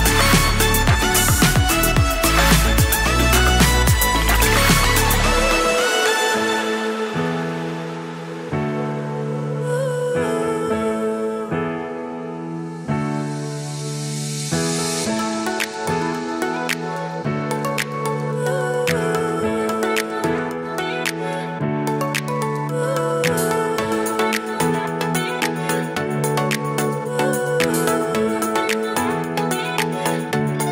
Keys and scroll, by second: 16.0 super+z, 24.9 super+x, 25.6 super+v, 25.9 super+Left, 26.6 super+s.